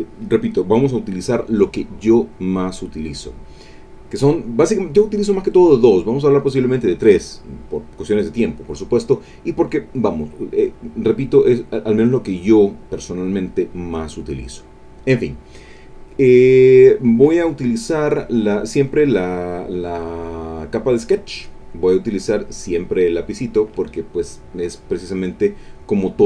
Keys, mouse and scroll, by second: 21.9 click.